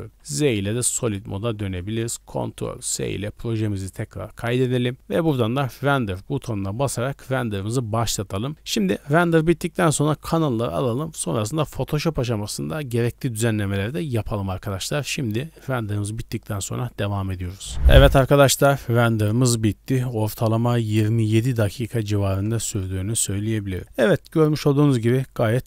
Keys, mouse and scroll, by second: 0.1 z, 1.0 click, 1.4 scroll up 1, 2.7 ctrl+s, 5.1-7.3 drag, 9.0 scroll down 1, 9.6 scroll down 3, 18.3 middle click, 22.2 ctrl+space, 22.8 scroll up 2, 23.3 middle click.